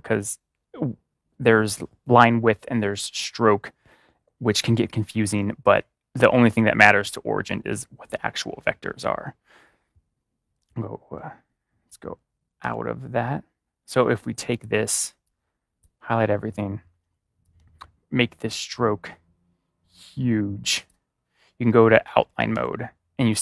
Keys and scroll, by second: 10.5 ctrl+y, 12.5 ctrl+y, 22.2 ctrl+y.